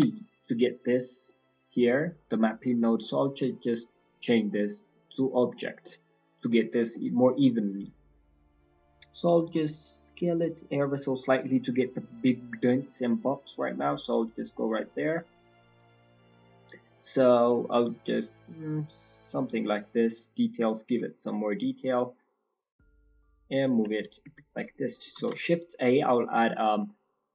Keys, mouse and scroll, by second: 0.8 scroll down 1, 1.2 middle click, 1.7-2.0 scroll up 6, 2.6 click, 3.3 click, 4.4-5.4 scroll down 6, 5.1-6.8 scroll up 13, 5.8 middle click, 6.8 middle click, 7.1-7.8 scroll up 3, 7.8-8.4 scroll up 2, 8.4 click, 8.4 scroll up 1, 12.1 middle click, 12.5-13.8 scroll up 1, 13.8-14.7 scroll up 4, 15.0-15.3 scroll down 3, 15.3-16.9 scroll up 3, 17.4 middle click, 17.7-18.1 scroll up 2, 18.1 click, 19.8 click, 21.1-21.7 scroll down 2, 21.7-22.8 scroll down 18, 23.1 click, 24.2 g, 24.8 click, 25.1 shift+a.